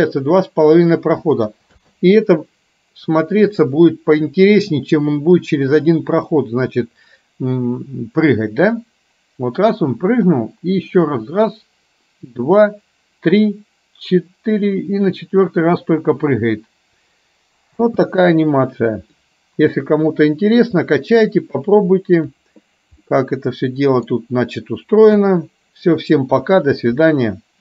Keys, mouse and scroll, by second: 1.9 space, 3.5 click, 17.9 space, 19.2-22.4 drag, 23.1-24.2 middle drag, 25.1 KP_1, 26.5 KP_3.